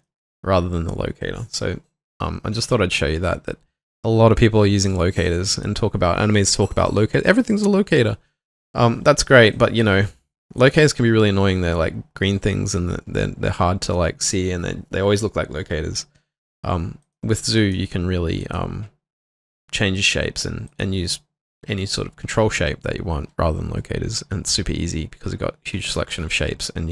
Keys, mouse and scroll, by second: 0.0 alt+middle click, 17.0 double click, 25.5-26.9 scroll up 1.